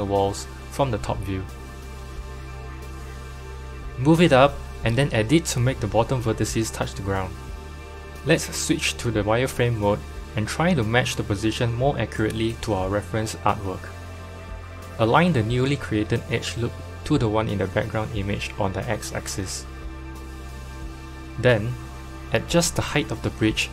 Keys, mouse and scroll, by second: 2.1 KP_1, 4.2 Tab, 5.0 g, 6.5 Tab, 6.9 click, 7.6 g, 10.8 Tab, 12.4 click, 17.2 g, 22.1 Tab, 23.0 1, 23.3 click, 23.5 Left.